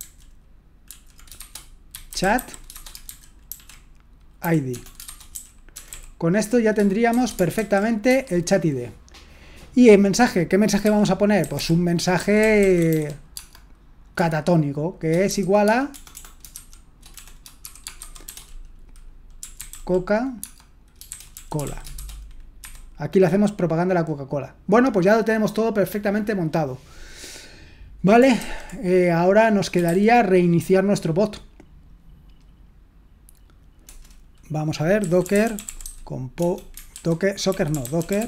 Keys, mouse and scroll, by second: 0.0-5.9 typing, 7.1-7.6 typing, 8.1 Escape, 11.3-13.8 typing, 15.3-23.1 typing, 29.6-30.4 typing, 34.7-38.2 typing, 36.9 ctrl+w.